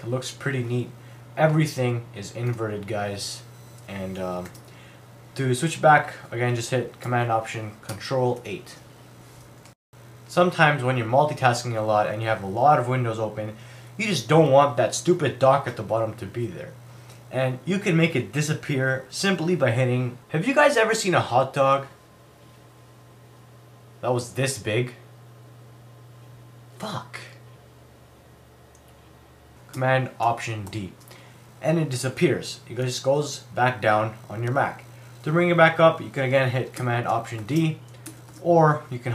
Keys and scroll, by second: 4.5 super+w, 8.4 ctrl+alt+super+8, 30.7 alt+super+d, 37.4 alt+super+d.